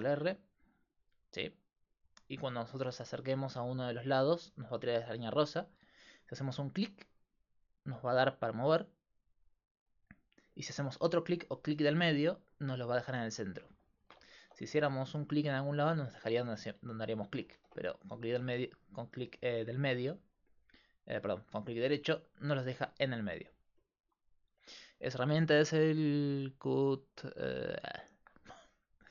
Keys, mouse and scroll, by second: 3.4-5.1 middle drag, 13.9 click, 14.4 ctrl+r, 15.7-17.6 drag, 17.6 ctrl+z, 22.9 middle click, 27.4-29.1 drag.